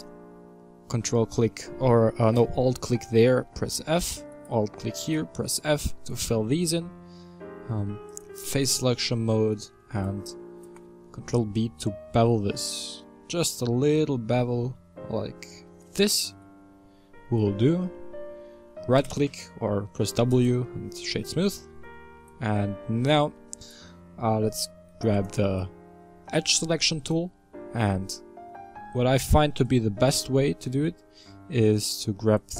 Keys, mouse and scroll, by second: 0.0-3.1 middle drag, 3.4 f, 4.3 alt+right click, 5.1 f, 8.1 click, 9.5 shift+right click, 10.6 ctrl+b, 13.5-15.8 scroll up 1, 16.2 Tab, 19.1 w, 21.0-22.0 middle drag, 22.0 Tab, 22.4-25.1 middle drag, 25.1 click, 26.2-32.5 middle drag.